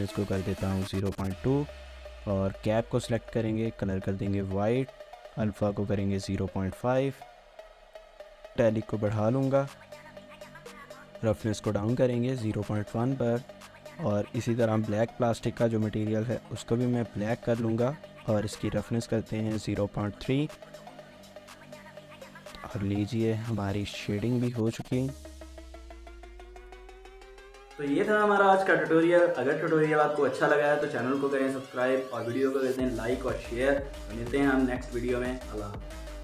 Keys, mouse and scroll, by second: 1.0 shift+middle click, 2.0-2.6 scroll up 2, 2.2 shift+middle click, 6.6 scroll down 1, 6.8 shift+middle click, 12.9 shift+middle click, 13.8 double click, 20.3 scroll down 1, 20.6 shift+middle click, 22.1 scroll down 1, 22.3 shift+middle click, 24.3 1, 25.0 shift+middle click, 27.2 ctrl+s.